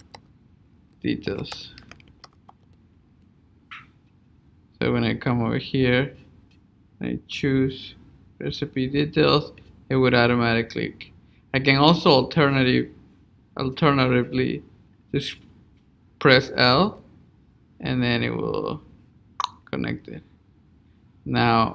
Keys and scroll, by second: 3.5 Return.